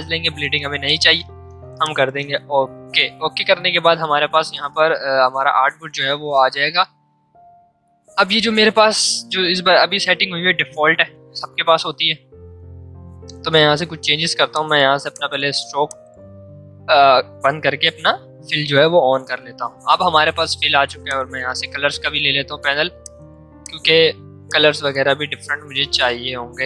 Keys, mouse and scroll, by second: 1.8 click, 13.5 x, 14.4 click, 21.0-23.0 drag.